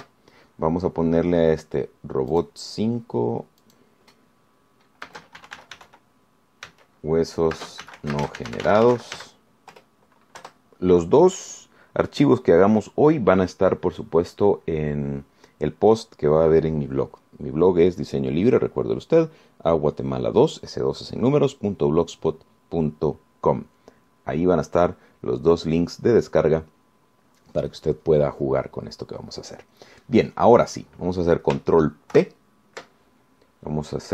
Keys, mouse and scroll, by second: 0.8 ctrl+shift+s, 3.6 click, 4.8 click, 6.3-10.9 typing, 11.0 Return, 11.6 Return, 33.4 ctrl+p.